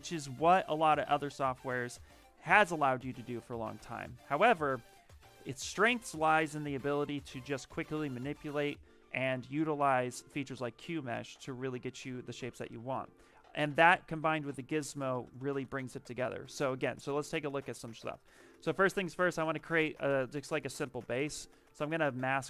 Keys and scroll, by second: 12.5 shift+m, 13.8 w, 16.2 q.